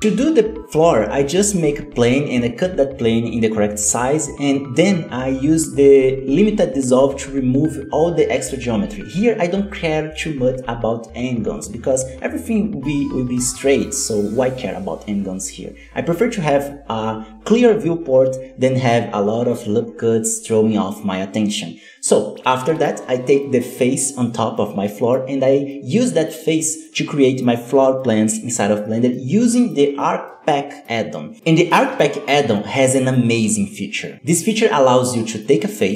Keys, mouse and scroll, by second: 0.0 g, 0.2 KP_7, 0.2 z, 0.5 Tab, 0.8 scroll down 3, 0.9 shift+middle click, 1.0 click, 1.4 alt+a, 1.9 click, 2.4 shift+middle click, 2.4 scroll up 1, 2.5 scroll down 2, 2.7 shift+middle click, 3.6 ctrl+r, 4.1 ctrl+r, 4.6 ctrl+r, 5.0 ctrl+r, 5.6 shift+middle click, 5.7-6.3 shift+scroll up 2, 5.9 alt+a, 6.0 z, 6.3 click, 6.5 x, 6.7 click, 6.8 x, 7.0 scroll down 2, 7.1 shift+middle click, 7.4 scroll up 2, 7.7 ctrl+r, 7.7 shift+middle click, 7.9 Tab, 8.2 shift+middle click, 8.5 x, 9.4 z, 9.7 middle drag, 9.9 scroll up 2, 10.1 middle click, 10.7-11.6 scroll down 1, 13.0 KP_1, 13.1 z, 13.3-14.0 scroll up 3, 13.4 shift+middle click, 14.0 e, 16.0 z, 16.2-16.5 scroll down 4, 16.2 middle click, 16.5 alt+a, 16.6-17.2 middle drag, 17.7 middle click, 17.9 right click, 17.9 scroll down 1, 18.2 Tab, 18.2 scroll up 3, 18.5 middle click, 18.8 3, 19.0 right click, 19.1 scroll down 2, 19.3 shift+d, 20.9 p, 21.4 Tab, 21.5 right click, 21.7 g, 22.3-23.3 drag, 23.3 shift+middle click, 23.5 scroll up 1, 23.7 Tab, 23.9 right click, 24.0 g, 24.2 scroll down 2, 24.3 Tab, 24.4 middle click, 24.4 scroll up 1, 24.6-25.2 middle drag, 25.2 scroll up 1, 25.4 scroll down 1, 25.4 middle click, 25.7-29.0 drag, 29.6 ctrl+s, 33.9 shift+a, 35.9 o.